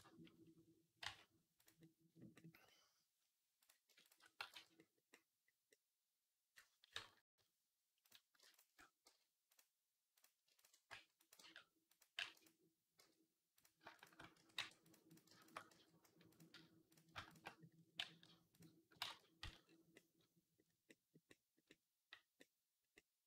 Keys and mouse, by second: 0.9 r, 4.6 x, 7.0 KP_3, 7.8 click, 7.8 middle click, 7.8 right click, 8.3 alt+shift+click, 8.3 alt+shift+middle click, 8.3 alt+shift+right click, 8.9 g, 10.7 r, 11.2 g, 12.0 g, 12.8 z, 13.7-17.6 alt+shift+right drag, 13.8 alt+shift+click, 14.2 s, 14.9 click, 15.2 alt+shift+click, 15.5 x, 16.7 click, 17.8-19.5 right drag, 17.8 g, 18.9 ctrl+z, 19.8 right click, 20.9 right click, 22.2 click, 22.4 click, 22.5 right click.